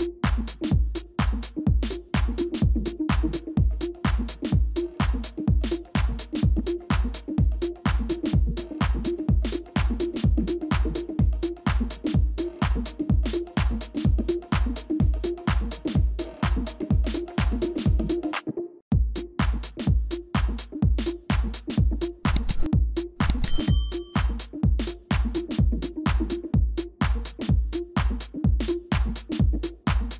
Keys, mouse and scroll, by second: 6.3 ctrl+-, 6.5 ctrl+-, 13.1 ctrl+-, 13.3 ctrl+-, 13.4 ctrl+-, 13.6 ctrl+-, 14.5 ctrl+space, 14.5 ctrl+click, 15.8 ctrl+-, 16.0 ctrl+-, 16.6 space, 27.8 double click, 28.4-30.1 typing.